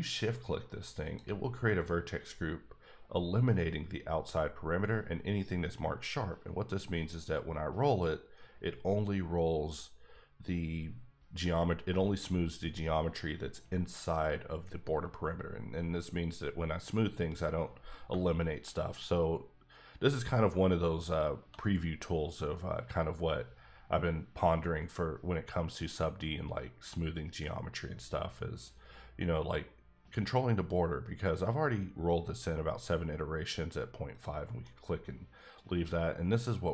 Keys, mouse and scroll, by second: 1.0 shift+click, 5.7-7.1 scroll up 12, 7.4-9.1 scroll up 4, 9.1-10.2 scroll up 3, 18.0 shift+Num_Lock, 18.0-18.4 scroll up 1, 20.0 scroll up 1, 20.9-21.5 scroll up 2, 21.8-24.3 scroll down 16, 24.5-26.2 scroll down 12, 26.2-27.4 scroll up 9, 27.4 scroll down 4, 28.0 scroll up 1, 28.3-28.6 scroll down 3, 28.6-30.4 scroll up 3, 34.1 scroll up 3, 34.2 click, 34.6 middle click.